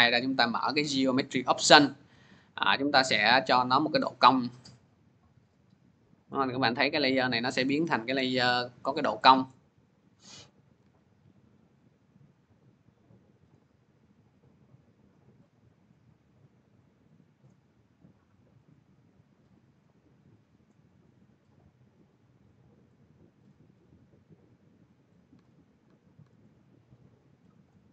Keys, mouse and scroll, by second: 0.0 click, 0.7 middle click, 2.1-2.6 scroll, 3.9 click, 6.5-6.8 scroll, 7.2-8.0 scroll, 8.0-8.9 scroll, 9.3-10.6 scroll, 10.6 c, 13.3 click, 17.1-23.2 drag, 25.1 c, 25.7 c, 26.0 c, 27.5 click.